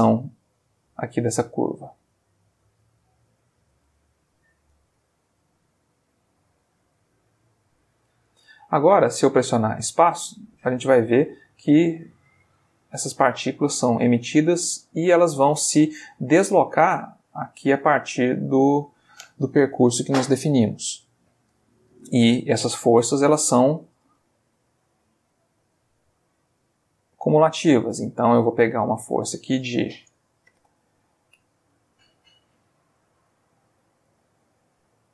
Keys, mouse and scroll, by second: 0.5 g, 1.5 click, 2.1 click, 2.7 g, 3.4 click, 4.1 ctrl+middle click, 5.0 ctrl+click, 5.2 ctrl+g, 5.8 ctrl+click, 6.3 click, 6.7 g, 8.0 click, 8.3 Tab, 11.7 middle click, 12.7-14.5 middle drag, 22.9 middle click, 23.5 shift+a, 26.2 click, 27.0 g, 27.8 click, 29.0 click, 30.5 7, 30.7 Return, 32.6 click, 33.3 click, 34.1 click.